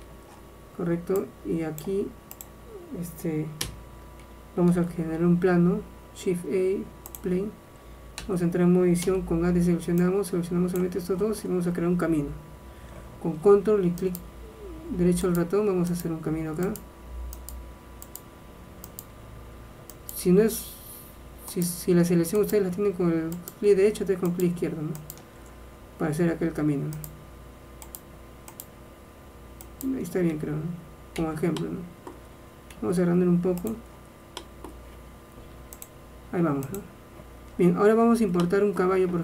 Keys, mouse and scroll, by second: 3.7 n, 4.8 shift+a, 8.3 Tab, 9.2 a, 10.1-12.1 drag, 14.1-21.5 right drag, 21.6 right click, 25.2 right click, 25.4-26.9 right drag, 27.1-31.3 right drag, 31.3 Tab, 32.8 s, 35.9-37.6 drag, 37.6 middle click.